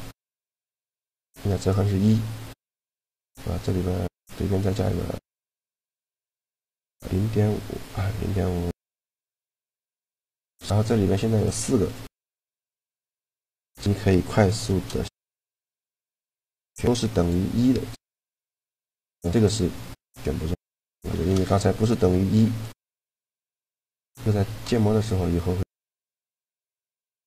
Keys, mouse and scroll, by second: 2.7-4.7 right drag, 4.2 shift+e, 10.3-13.9 right drag, 14.1 shift+g, 16.8-20.7 right drag, 19.5-21.9 drag, 20.7 shift+g, 21.9 right click, 23.0-24.6 right drag, 23.9 shift+g, 24.8-26.0 drag, 27.0 click, 27.1 Tab.